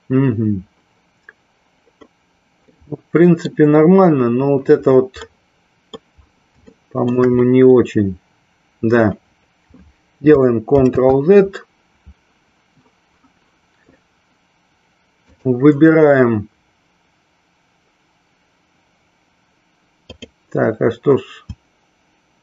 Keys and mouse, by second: 2.9 middle click, 5.5 middle click, 6.9 shift+middle click, 15.4 click, 20.3 click.